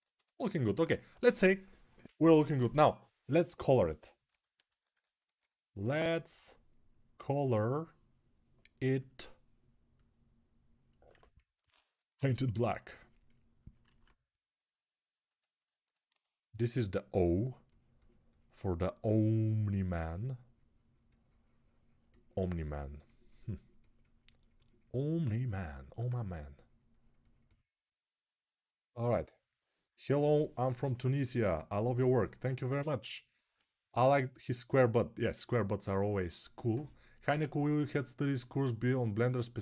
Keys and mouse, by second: 1.0 ctrl+s, 5.1-8.6 alt+drag, 8.6 right click, 11.0-12.7 alt+shift+middle drag, 12.7-39.6 drag, 13.7 alt+q.